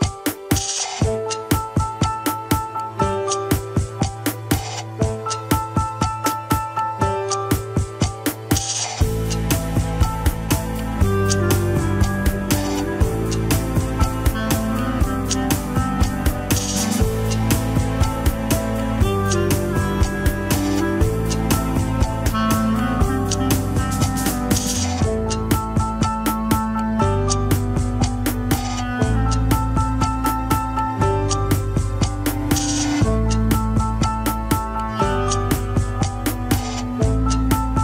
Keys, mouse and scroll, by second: 1.2 KP_3, 2.4 shift+click, 4.1 scroll down 1, 4.8 click, 5.7 right click, 6.2 scroll down 2, 7.5-8.7 middle drag, 8.7 KP_3, 9.1 alt+z, 9.4 scroll down 3, 10.1 ctrl+Tab, 10.2 click, 10.6 KP_1, 10.7 scroll down 3, 11.2 shift+middle click, 12.0 ctrl+s, 12.8 shift+click, 14.5 ctrl+p, 15.4 Up, 15.5 Up, 32.2 click, 32.5 scroll up 3, 33.1 shift+middle click, 33.3 scroll up 1, 33.7 ctrl+Tab, 34.4 click, 35.0 alt+z, 35.8 alt+z, 36.1 click.